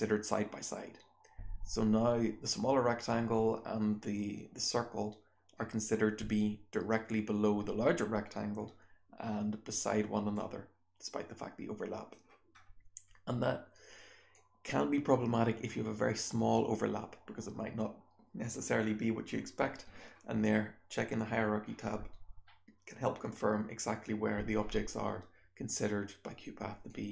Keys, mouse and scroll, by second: 10.3-12.1 drag, 12.6-13.3 scroll up 1, 13.3-14.3 scroll up 1, 14.3-16.5 drag, 14.3-16.5 scroll up 1, 16.5-17.7 scroll up 1, 17.7-19.2 scroll down 1, 19.2-26.8 scroll up 1, 26.8-27.1 drag, 26.8-27.1 scroll up 1.